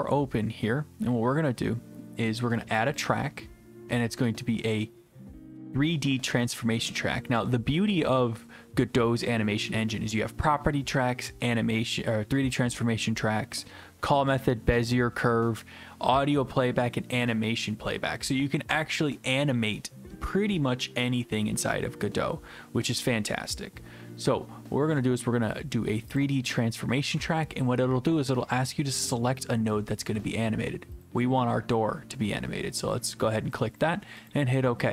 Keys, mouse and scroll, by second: 3.0 click, 26.2 click, 34.3 click.